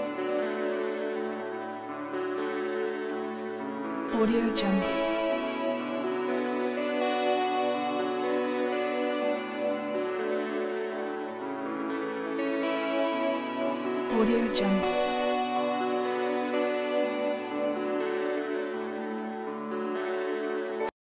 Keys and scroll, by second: 20.6 s.